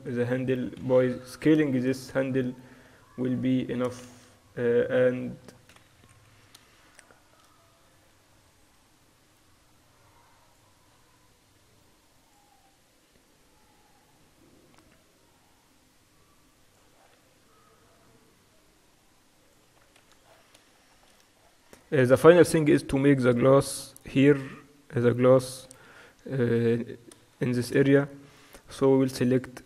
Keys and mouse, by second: 0.0-1.0 typing, 3.0 middle click, 3.4 click, 3.6 click, 6.1-6.4 KP_6, 8.0 click, 8.3 Tab, 8.4 click, 9.4 middle click, 9.8-11.6 drag, 9.8 right click, 11.0 Tab, 11.9-15.9 drag, 12.6 Tab, 16.9 Tab, 17.5-18.9 middle drag, 18.9-21.0 drag, 19.9 Tab, 20.0 ctrl+s, 20.5 middle click, 22.5-22.9 KP_4, 23.3 KP_4, 23.8 Tab, 24.7 Tab, 25.1 click, 27.1 middle click, 28.1-29.6 middle drag, 29.4-29.6 drag.